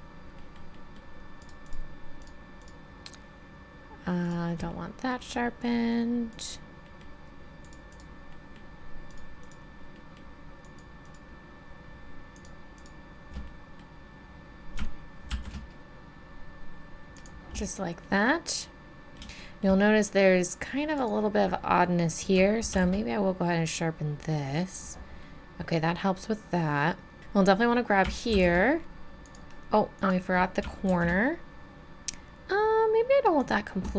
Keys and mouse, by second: 0.4-4.7 middle drag, 4.8 middle click, 5.1 middle click, 5.5-7.0 middle drag, 8.3 middle click, 13.3 middle click, 14.4 middle click, 14.7 click, 15.3 shift+e, 19.0-20.9 middle drag, 22.7 shift+e, 25.2 click, 25.4 click, 28.3 shift+e, 30.9 shift+e.